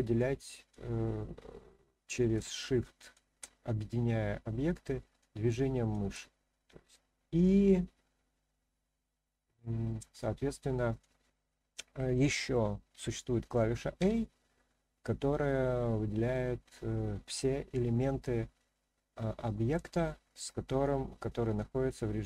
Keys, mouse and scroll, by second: 0.1-0.7 drag, 2.5-3.1 shift+drag, 5.2-5.9 shift+drag, 10.2-11.0 drag.